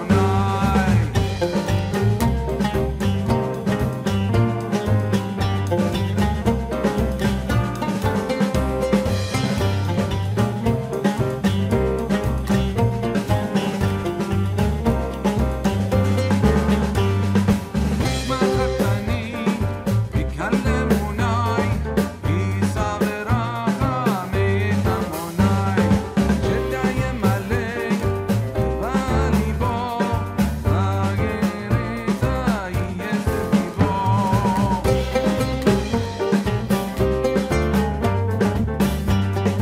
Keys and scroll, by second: 33.1 ctrl+h, 34.9 ctrl+t.